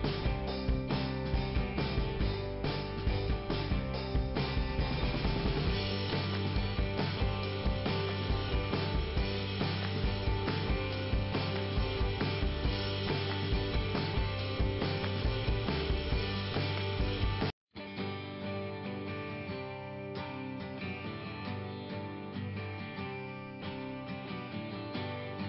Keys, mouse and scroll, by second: 0.4 click, 1.1 click, 1.3 click, 3.6 middle click, 4.9 scroll up 2, 5.9 click, 6.8 click, 7.4 scroll down 2, 9.5-10.3 scroll down 1, 10.6 scroll up 1, 11.7 click, 12.9 middle click, 15.9 click, 17.4 right click, 18.0-18.4 scroll down 1, 20.9 click, 21.8 click, 22.0 click.